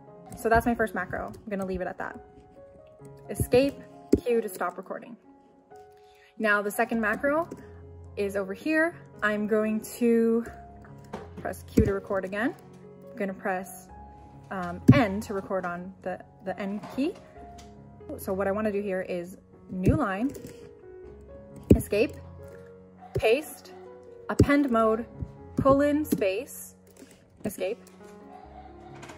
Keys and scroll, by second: 3.4 Escape, 4.1 q, 11.8 q, 14.9 n, 19.9 o, 21.7 Escape, 23.1 p, 24.4-26.8 typing, 27.4 Escape.